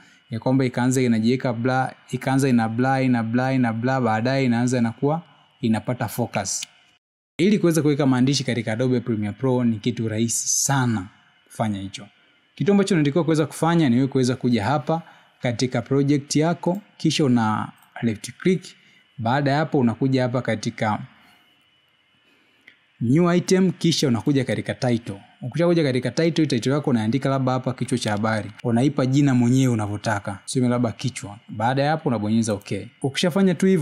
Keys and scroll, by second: 26.3-28.1 typing, 30.3 BackSpace.